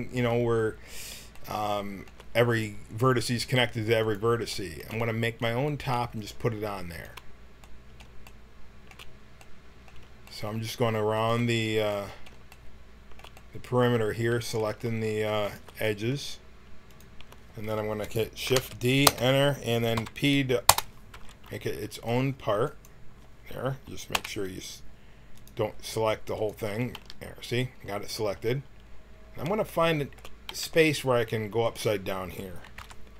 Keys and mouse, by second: 1.3 middle click, 4.0-5.0 drag, 5.0 middle click, 5.9 middle click, 6.9-8.8 middle drag, 9.3 middle click, 10.4 middle click, 11.4 middle click, 13.3 middle click, 14.1 middle click, 15.4-18.5 drag, 18.5 shift+d, 19.9 p, 21.2 Tab, 24.1 KP_1, 25.4-27.6 drag, 26.9 g, 30.5 g, 32.3 click, 32.8 KP_Decimal.